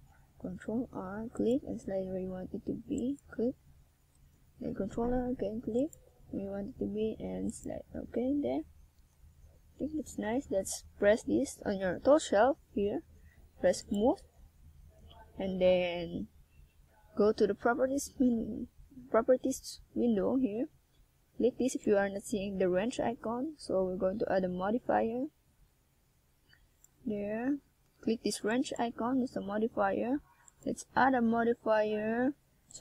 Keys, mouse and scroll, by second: 0.2 click, 0.9 click, 4.9 click, 7.0-7.3 scroll up 1, 7.8 middle click, 10.5 KP_1, 11.8 KP_5, 12.1 KP_5, 15.5 click, 17.6-18.1 shift+scroll up 2, 18.2 shift+scroll up 1, 18.8 scroll up 1, 19.4-19.9 scroll up 3, 24.8 shift+a, 30.1 click.